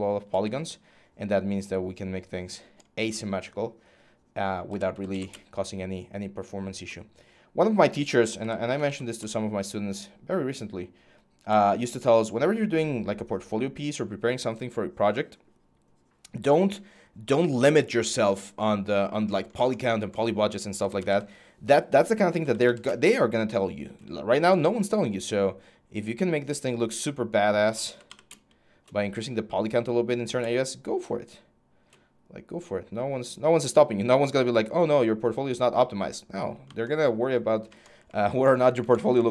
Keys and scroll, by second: 4.3-9.2 typing, 11.0-11.8 typing, 20.4-23.0 typing, 27.2-28.4 typing.